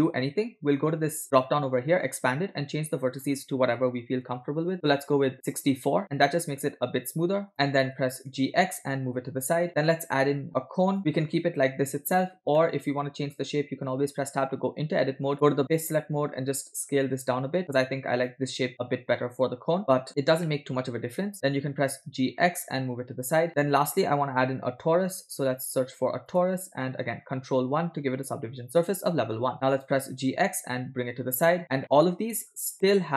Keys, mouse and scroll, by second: 1.4 click, 3.2-5.9 drag, 7.5 click, 7.5 scroll down 2, 8.4 g, 10.1 shift+a, 11.3-11.8 scroll up 4, 12.6-13.4 middle drag, 14.0 Tab, 15.3 click, 15.7 click, 16.6 s, 19.8 ctrl+s, 20.1 Tab, 20.1 scroll down 2, 20.5-21.2 middle drag, 21.4 scroll down 1, 22.2 g, 23.7 shift+a, 28.3 ctrl+1, 29.9 g, 31.8-32.1 shift+middle drag, 32.4 scroll up 2, 32.7-33.1 shift+middle drag.